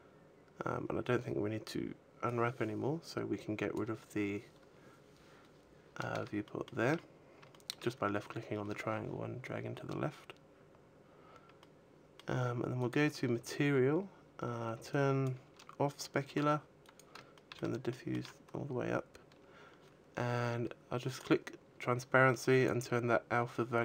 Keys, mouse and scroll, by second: 1.9 click, 3.5 click, 5.5-6.2 scroll down 2, 6.2 shift+middle click, 6.2-6.7 scroll down 2, 6.7-7.3 shift+scroll up 3, 7.3 shift+middle click, 11.4 middle click, 12.6 click, 14.7 click, 17.0 click, 17.1 shift+middle click, 17.3 shift+middle click, 17.7 shift+middle click, 18.5 shift+middle click, 18.5-19.1 scroll down 4, 19.1-19.9 scroll down 3, 20.9 click, 22.2 click.